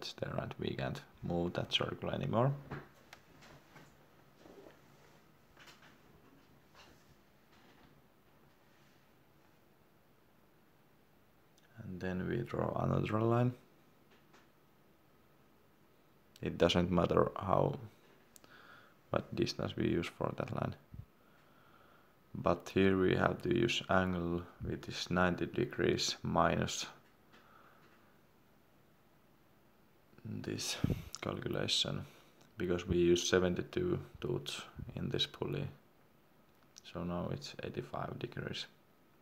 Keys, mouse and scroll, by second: 0.1 scroll up 1, 0.6 click, 3.6 scroll down 1, 5.6 scroll up 1, 6.0 middle click, 7.1 scroll up 1, 7.6 middle click, 8.4 l, 18.4 Tab, 19.8 9, 27.2 BackSpace, 29.7-30.8 typing, 32.2 shift+7, 32.8 7, 33.8 shift+9, 36.5 9, 36.6 Return, 38.5 scroll down 1.